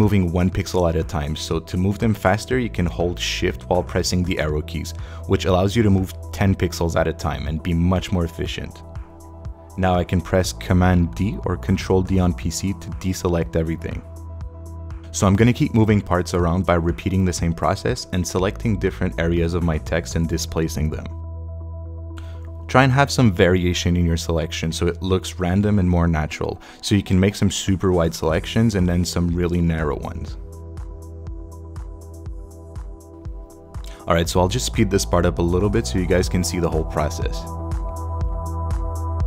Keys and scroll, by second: 3.9 shift+Right, 6.3 shift+Left, 7.9 shift+Left, 10.6 super+d, 20.5 super+Left, 21.1 shift+super+Left, 22.0 shift+Left, 24.0 super+d, 30.4 shift+Left, 31.8 shift+Left, 33.7 super+d, 38.2 super+Right, 38.5 shift+Left.